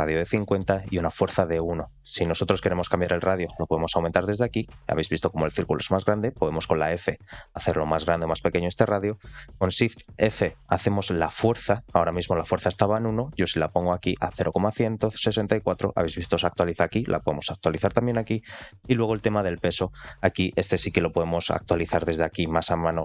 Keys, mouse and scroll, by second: 2.9 click, 5.8 f, 10.0 shift+f, 16.7-17.7 drag, 20.2-22.5 drag.